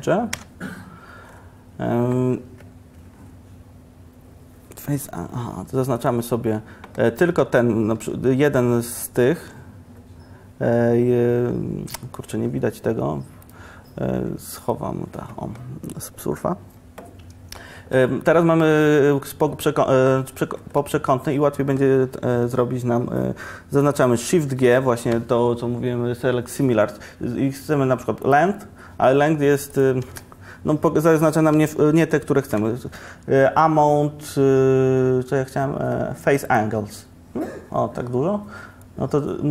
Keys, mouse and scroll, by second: 0.4 2, 16.9-18.1 middle drag, 24.6 shift+g, 29.8-32.5 drag, 32.5 shift+g, 38.9-39.5 middle drag.